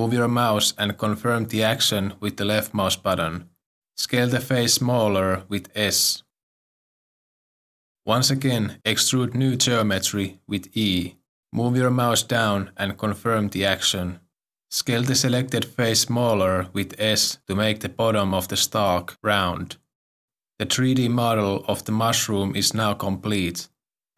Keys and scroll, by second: 5.5 e, 7.5 s, 10.4 e, 15.6 s.